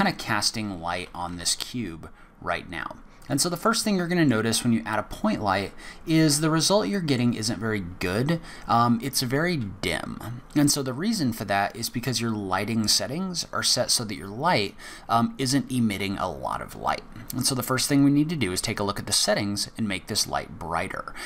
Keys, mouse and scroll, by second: 0.0 middle click, 1.0 g, 3.6 middle click, 5.1 middle click, 7.7-8.1 scroll down 1, 8.1-10.5 scroll up 1.